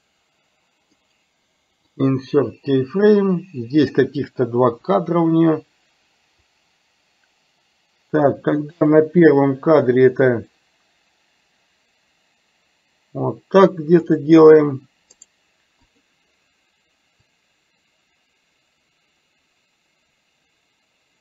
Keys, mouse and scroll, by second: 1.3 right click, 3.9 click, 4.9 Delete, 6.5-9.0 drag, 10.5-14.2 drag, 15.4 right click, 17.3-21.2 drag.